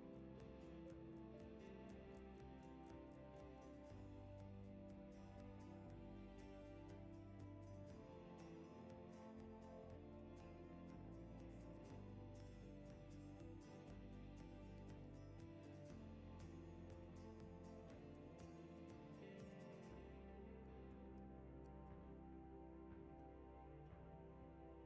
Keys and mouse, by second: 0.0-0.3 typing, 1.4 r, 3.2-3.6 drag, 3.6 Tab, 4.0 alt+z, 4.4 click, 4.7 alt+z, 4.8 s, 5.7 Tab, 5.9 Tab, 6.1 g, 6.7 Tab, 7.0 shift+drag, 7.2-7.6 shift+drag, 7.7 click, 8.2 g, 9.6 shift+middle drag, 10.0 s, 10.4 g, 12.3 g, 12.8 g, 15.4 click, 17.1 shift+d, 17.9 s, 19.5 g, 20.2 g, 21.7-24.5 typing.